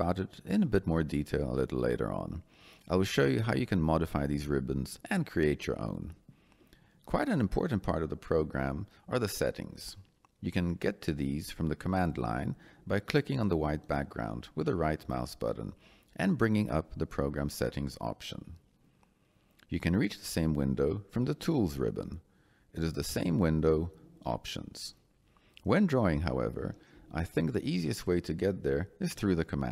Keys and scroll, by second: 20.7 Escape.